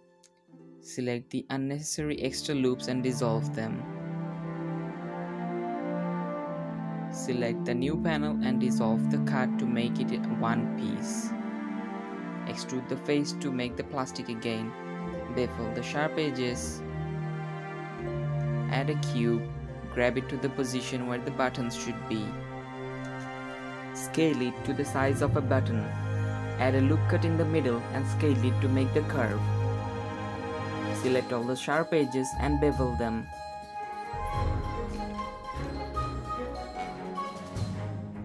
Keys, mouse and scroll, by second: 0.2 alt+click, 1.0 middle click, 1.1 alt+shift+click, 2.4 middle click, 2.8 x, 7.1 click, 7.7 Tab, 8.2 middle click, 8.3 2, 8.6 click, 9.0 x, 11.3 Tab, 11.9 a, 12.3 e, 14.4 click, 15.8-16.6 shift+drag, 16.6 ctrl+b, 18.2-19.4 middle drag, 19.4-21.9 typing, 21.6 shift+middle click, 23.5 s, 24.5 g, 25.4 g, 26.9 ctrl+r, 27.6 s, 29.0 Tab, 29.2 alt+click, 29.6 middle click, 29.7 shift+click, 30.0 middle click, 30.1 ctrl+b, 30.9 Tab, 31.0 middle click, 31.5 scroll up 1, 31.7 Tab, 32.3 click, 32.8 shift+click, 33.2 shift+click, 33.3 middle click, 33.6 shift+click, 33.9-35.2 middle drag, 35.2 alt+click, 35.6 middle click, 35.8 alt+shift+click, 35.9 middle click, 36.1 alt+shift+click, 36.2 middle click, 36.6 alt+shift+click, 37.4 middle click, 37.9-38.2 scroll up 1.